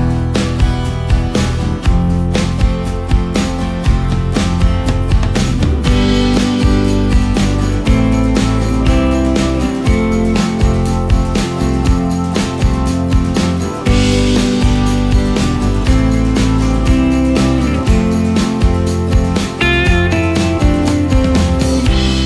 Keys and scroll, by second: 5.5 space, 6.3 ctrl+space, 7.2 space, 10.8 ctrl+space, 14.6 ctrl+alt+space.